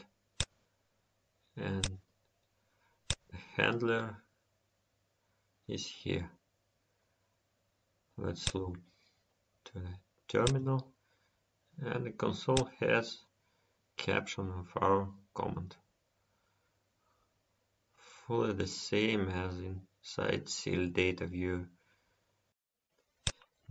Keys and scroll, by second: 4.9 F10, 17.8 F10.